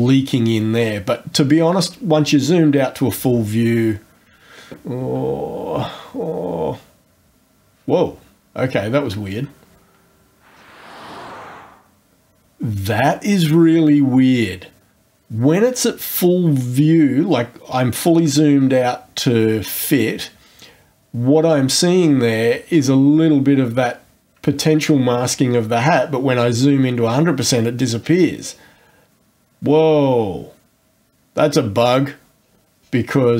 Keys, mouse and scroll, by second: 0.8-1.1 scroll down 1, 1.6 scroll down 1, 5.6-6.2 scroll up 2, 10.5-11.3 scroll down 2, 22.4-23.0 scroll up 3, 26.0-26.3 scroll up 1, 28.4-28.7 scroll down 2, 32.4-33.1 scroll up 4.